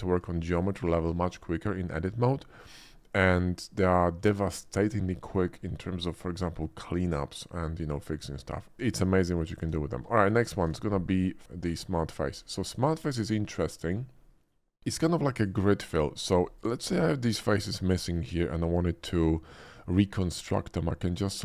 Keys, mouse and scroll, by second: 0.4 shift+middle click, 2.9 shift+middle click, 8.0 shift+middle click, 8.7 shift+middle click, 9.3 Tab, 9.7 x, 9.9 click, 10.2 shift+a, 11.1 click, 11.5 middle click, 12.1 Tab, 12.6 middle click, 12.8 Tab, 13.1 middle click, 13.8 click, 14.1 middle click, 15.0 ctrl+click, 15.9 ctrl+click, 16.3 ctrl+middle click, 16.9 x, 17.4 click, 18.1 shift+middle click, 18.3-19.5 middle drag, 19.5 right click, 19.6 middle click, 20.1 Tab, 21.1 click.